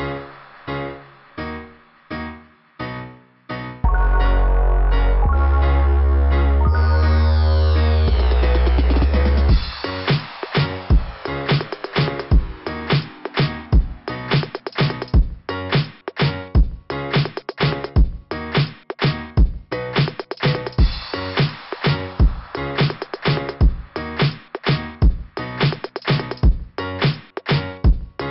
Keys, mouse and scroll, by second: 1.6 click, 1.7 click, 3.1 click, 4.8 click, 4.9 click, 6.2 click, 6.3 click, 8.4 click, 9.6 click, 11.4 click, 11.5 click, 11.9 click, 12.0 click, 13.5 click, 14.7 click, 15.0 click, 15.3 click, 19.9 scroll up 2, 23.7 scroll down 1, 25.2 click, 27.3 click, 27.4 click.